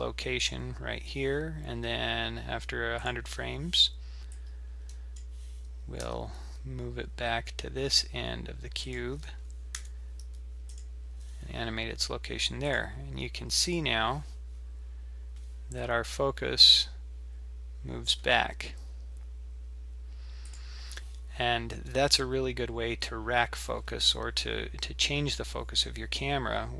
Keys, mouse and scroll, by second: 3.0 click, 4.3 click, 6.0 g, 12.6 click, 13.7 click, 20.5 click.